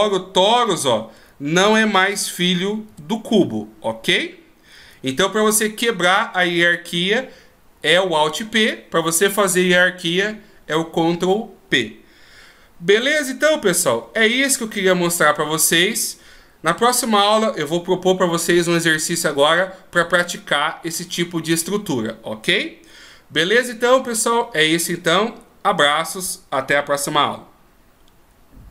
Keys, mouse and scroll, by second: 0.3 g, 1.9 right click, 3.2 g.